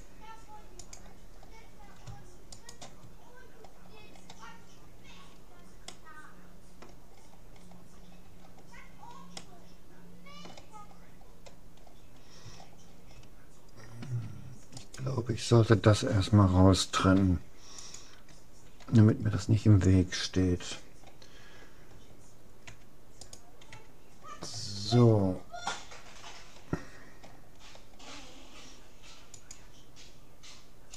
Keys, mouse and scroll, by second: 1.3-4.7 middle drag, 1.5 click, 2.5-4.3 right drag, 4.7-5.9 scroll down 1, 5.9-9.5 middle drag, 10.1-11.1 middle drag, 11.1-11.9 scroll up 1, 11.9-13.1 middle drag, 13.1 scroll down 1, 14.1 a, 14.9-16.7 right drag, 16.9 p, 19.3-21.3 middle drag, 22.7 Tab, 23.3-24.9 right drag, 23.7 Tab, 25.1-26.1 middle drag, 29.3-30.9 drag, 29.3 middle click.